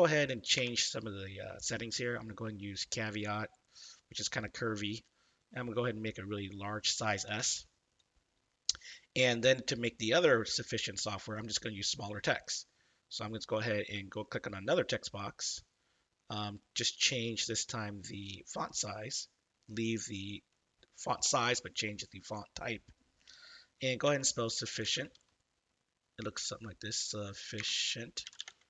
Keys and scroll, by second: 0.5 BackSpace, 7.4 shift+s, 24.0-25.6 typing, 27.6-28.6 typing.